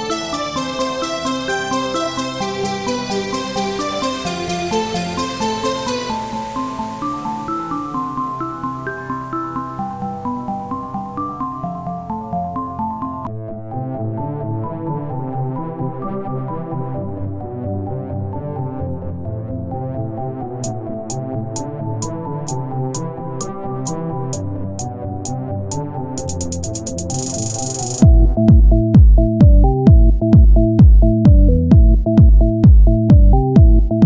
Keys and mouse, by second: 1.1 z, 1.8 shift+d, 5.0 s, 6.7 Tab, 7.2-8.9 drag, 8.9 Tab, 9.3-11.9 drag, 10.0 c, 10.2 right click, 12.0 Tab, 12.3 z, 14.4 click, 15.0 r, 17.0-18.2 drag, 18.2 r, 19.5-20.7 drag, 20.8 r, 24.5-25.9 middle drag, 25.9 KP_1, 26.3 z, 33.1 z, 33.9 right click.